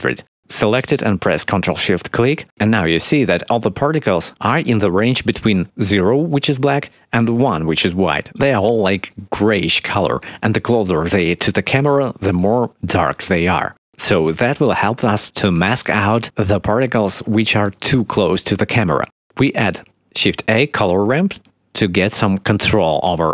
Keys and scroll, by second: 19.9 shift+a.